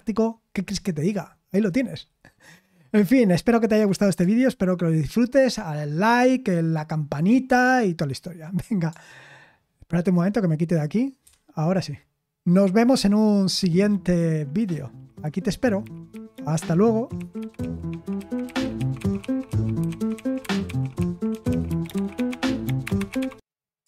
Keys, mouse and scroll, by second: 11.2 super+7, 13.4 super+x, 23.8 click.